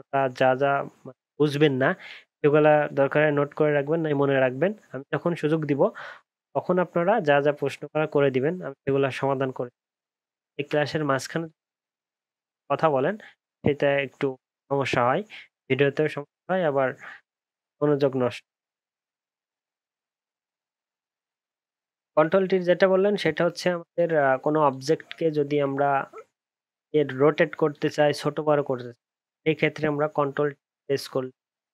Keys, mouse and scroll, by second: 19.7 alt+scroll up 2, 19.8 alt+scroll down 1, 19.9 alt+scroll up 1, 20.1 alt+scroll down 1, 20.7 alt+scroll up 1, 21.0 alt+scroll down 1, 21.2 alt+scroll up 1, 22.0 ctrl+t, 25.8-26.3 alt+scroll up 1, 26.3-27.4 alt+scroll down 2, 27.9 alt+scroll, 27.9 ctrl+z.